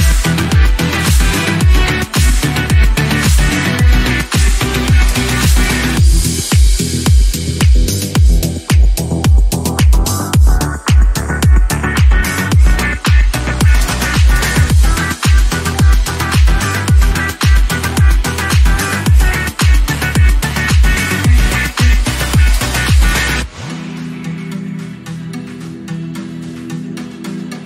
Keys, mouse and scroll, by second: 7.1 scroll down 3, 7.3-9.1 middle drag, 9.1-9.7 scroll down 2, 9.7 middle click, 10.1 click, 14.5-17.2 drag, 18.4-20.1 drag, 23.2 ctrl+z, 24.0-24.4 scroll down 3, 24.4 scroll up 5, 25.1-27.6 drag.